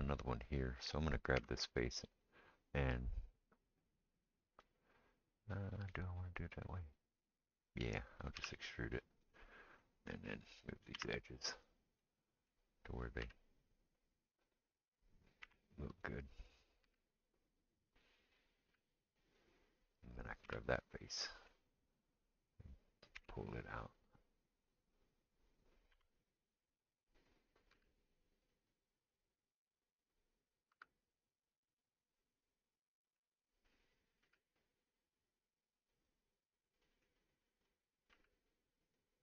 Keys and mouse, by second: 1.4 3, 1.5 click, 4.2-5.8 middle drag, 5.8-39.2 right drag, 8.4 e, 10.9 2, 11.6 click, 11.6 middle click, 13.2 g, 14.8-17.2 middle drag, 15.4 1, 16.0 click, 16.8 g, 18.4 click, 18.4 middle click, 18.6 g, 20.4 3, 20.5 click, 20.5 middle click, 23.2 e, 25.9 2, 26.7 click, 26.7 middle click, 27.7 g, 30.2 click, 30.2 middle click, 30.7 g, 34.3 g, 37.6 click, 38.1 g.